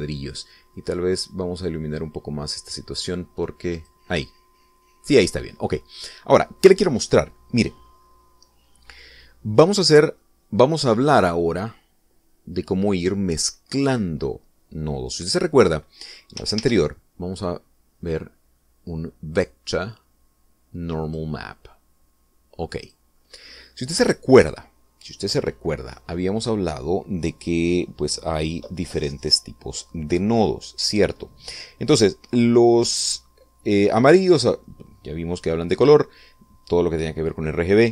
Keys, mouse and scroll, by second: 2.1-5.5 drag, 5.8-6.2 scroll down 2, 11.6 middle click, 13.1-14.5 drag, 18.0 shift+a, 22.4 click, 24.2 click.